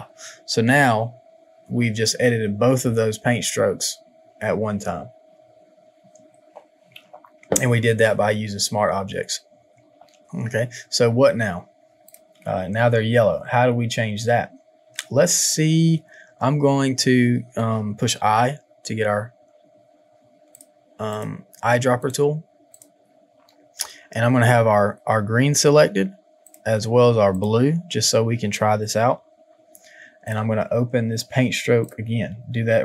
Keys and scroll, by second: 18.2 |, 29.2 v.